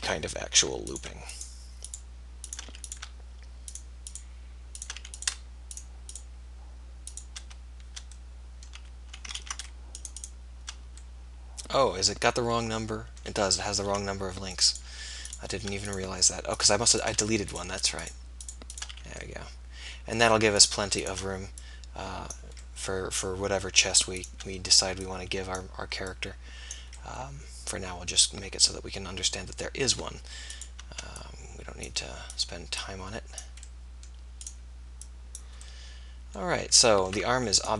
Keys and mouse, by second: 0.1 f, 2.8 f, 5.1 f, 8.9 f, 9.5 ctrl+z, 14.0 ctrl+r, 17.3 f, 19.0 f, 23.1 middle click, 25.2-31.3 middle drag, 34.6-36.8 middle drag.